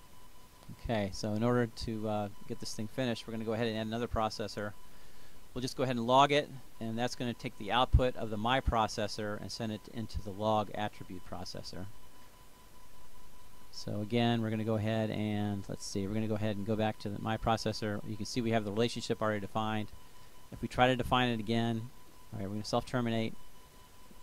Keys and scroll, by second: 4.1-5.2 typing.